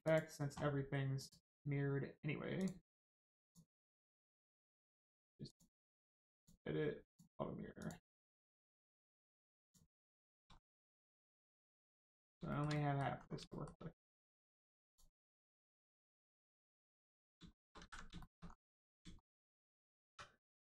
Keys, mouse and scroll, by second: 0.0 click, 2.5 click, 5.4 click, 7.7 click, 10.1 shift+middle click, 10.5 scroll up 1, 11.1 Tab, 11.3 middle click, 11.7-12.3 scroll up 1, 12.5 shift+middle click, 12.7 middle click, 13.4 shift+middle click, 14.1 scroll up 1, 14.8 click, 15.7 middle click, 17.1 click, 17.5 shift+middle click, 17.7 alt+z, 18.1 shift+middle click, 18.4 scroll up 1, 19.2 shift+middle click.